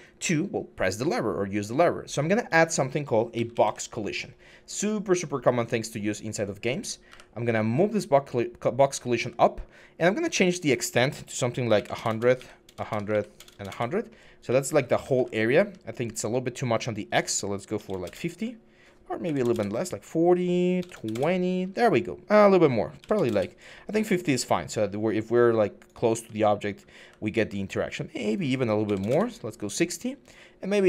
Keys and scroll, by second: 3.1-3.4 typing, 6.9 w, 11.5-15.5 typing, 13.5 Return, 17.3-21.1 typing, 22.5-23.3 typing, 25.7-27.2 typing, 28.4-29.2 typing, 30.4-30.8 typing.